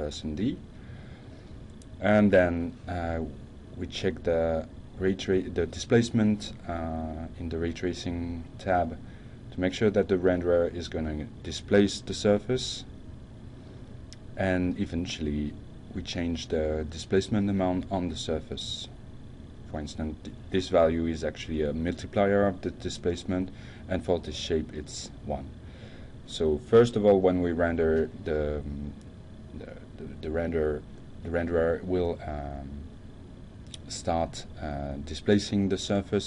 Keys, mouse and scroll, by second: 0.7 click, 2.0 click, 2.7 click, 3.1 click, 5.4 click, 14.3 click, 15.8 click, 17.5 shift+1, 18.2 Return, 20.6 click, 21.8 F5.